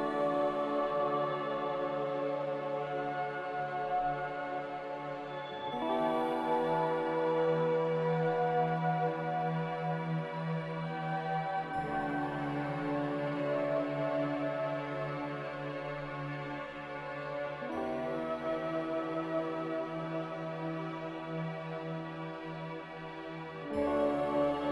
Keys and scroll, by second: 19.5 z.